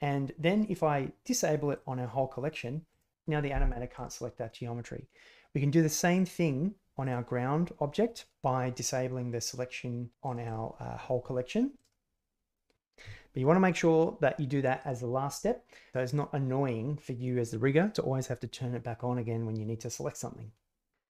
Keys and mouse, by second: 1.7 click, 2.9 click, 3.9 click, 7.0 click, 10.2 click, 10.4 click.